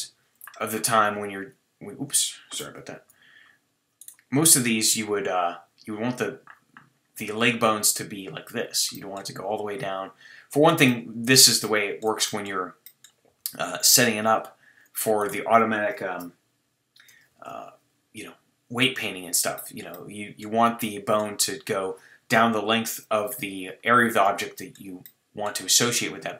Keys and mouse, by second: 1.1 g, 2.7 z, 4.5 g, 8.0 g, 9.4 g, 13.3 g, 15.2-16.8 drag, 17.3 ctrl+r, 19.6 click, 25.2-26.3 drag.